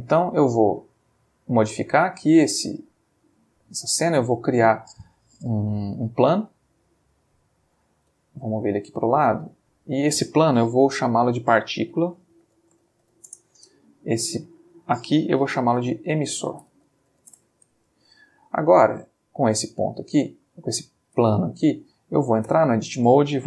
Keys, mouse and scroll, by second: 0.4-1.1 ctrl+middle drag, 1.5 ctrl+click, 2.1 middle click, 4.1-4.7 middle drag, 5.4 shift+a, 6.3 click, 7.3 ctrl+middle click, 8.1 g, 9.1 click, 10.7 F2, 11.9-13.1 typing, 13.2 shift+Return, 14.4 click, 15.4 F2, 16.3-17.2 typing, 17.3 Return, 18.7 click, 19.2-19.7 shift+middle drag, 19.7-20.4 ctrl+shift+middle drag, 20.5-22.0 ctrl+shift+middle drag, 22.5 Tab.